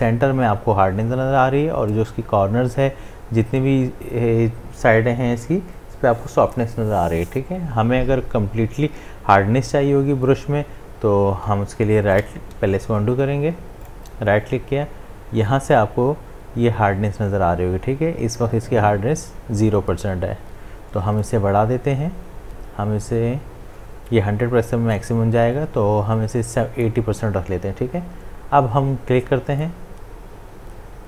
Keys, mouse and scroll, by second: 12.1 ctrl+z, 13.9 right click, 21.2-29.3 drag, 29.6-31.0 drag.